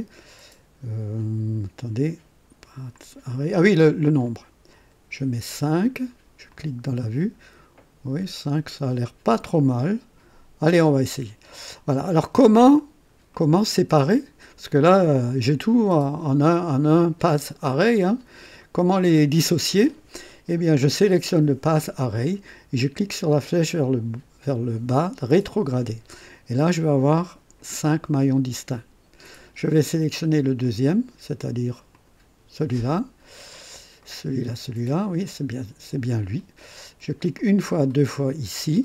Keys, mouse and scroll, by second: 2.9 click, 4.2 click, 4.9 scroll up 1, 6.5 click, 8.5-8.8 scroll up 1, 9.5-10.9 right drag, 11.7 click, 12.8-13.2 scroll down 1, 13.3 right click, 25.3 click, 27.2 click, 30.6 click, 31.9 click, 33.4-34.0 scroll up 2, 34.0 right click, 35.3 click, 37.4 click, 37.9 click.